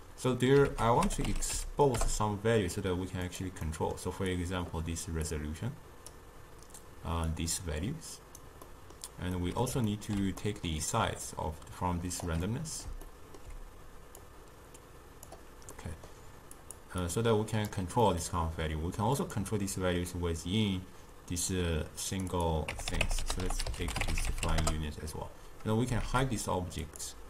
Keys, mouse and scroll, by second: 0.7 ctrl+a, 3.7-4.4 middle drag, 4.4-5.4 drag, 7.3 drag, 8.7-11.3 middle drag, 11.3 click, 12.5-14.3 middle drag, 14.3-15.8 drag, 15.8-16.7 middle drag, 16.7 click, 17.1-18.1 drag, 18.1-19.2 middle drag, 19.2 click, 22.2 click, 22.4-25.4 drag, 26.1 shift+a.